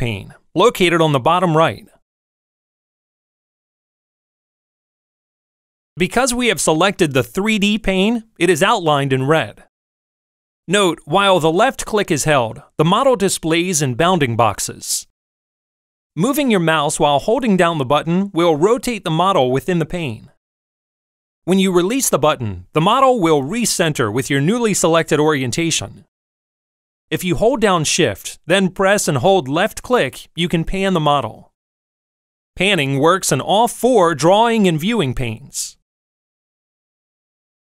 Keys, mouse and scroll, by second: 3.7-14.1 drag, 15.4-16.5 drag, 17.2-18.3 drag, 19.0-20.2 drag, 25.1 click, 29.3-30.8 shift+drag, 31.7 shift+click, 35.0 shift+click, 36.3 shift+click, 37.5 shift+click.